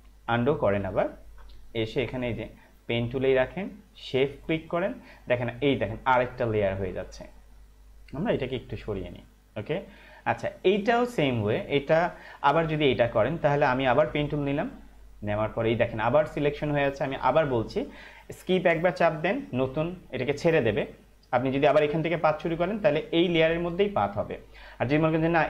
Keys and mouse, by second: 0.9 ctrl+alt+z, 4.6 click, 8.2 click, 10.5 space, 10.6 click, 11.0 space, 14.8 click, 19.4 Escape.